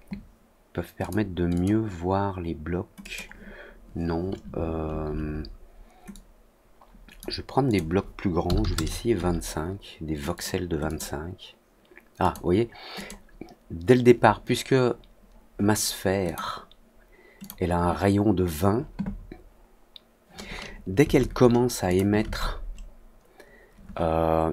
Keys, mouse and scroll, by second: 0.9 click, 1.5 click, 2.9 click, 6.0-7.1 drag, 7.6 click, 10.3 click, 10.8 click, 12.1 click, 12.9 click, 16.2 click, 17.3 click, 21.8 click.